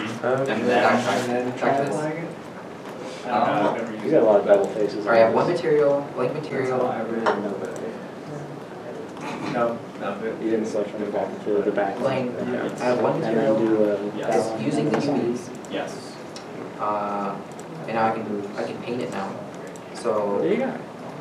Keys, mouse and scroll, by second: 0.5 Tab, 1.7 Tab, 5.2 Tab, 5.2 middle click, 14.8 middle click, 15.2 scroll up 1, 16.0 Tab, 16.5 Tab, 16.8 a, 17.2 a, 17.6 Tab, 18.0-18.4 scroll down 1, 19.1 middle click.